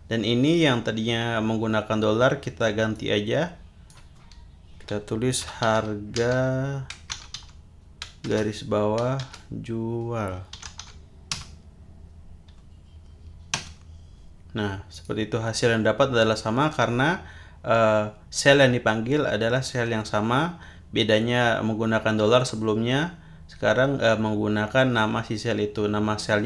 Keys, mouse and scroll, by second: 2.9 click, 5.1-9.2 typing, 10.3-11.3 typing, 11.3 Return, 13.5 Return, 14.9 click.